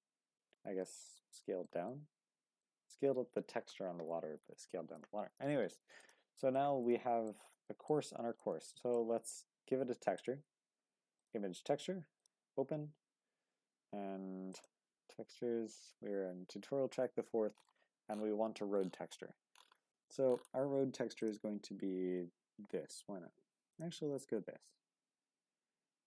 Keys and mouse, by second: 0.8-1.2 middle drag, 1.4 shift+middle drag, 1.9-2.6 middle drag, 4.7 shift+middle drag, 6.5-7.3 middle drag, 7.7 shift+middle drag, 8.1-8.4 middle drag, 8.7 shift+middle click, 10.2-11.4 drag, 12.2 drag.